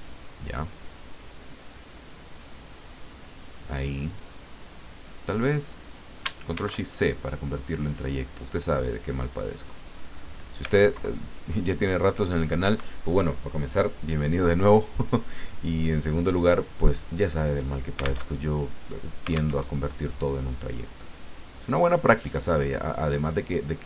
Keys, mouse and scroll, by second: 0.8-3.7 drag, 6.5 ctrl+shift+c, 7.8 click, 9.2-10.2 drag, 10.9 alt+Left, 15.8 click, 17.0 click, 18.3 alt+Tab, 19.6 alt+Tab, 22.3 click.